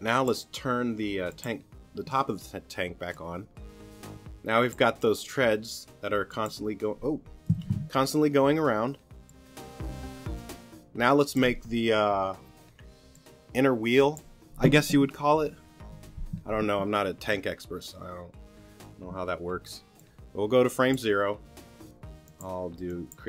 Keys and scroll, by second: 7.5 super+z.